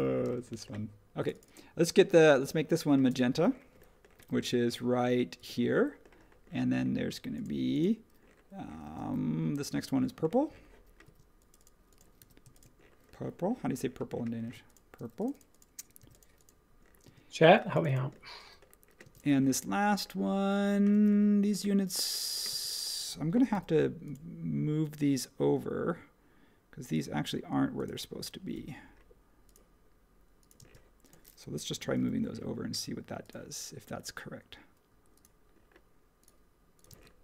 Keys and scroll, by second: 0.2 space, 4.1 b, 8.8 space, 12.2 b, 14.4 space, 16.0 b, 17.0 space, 19.0 space, 20.9 space, 22.5 space, 23.5 m, 28.5 ⟲, 31.9 m, 36.8 space.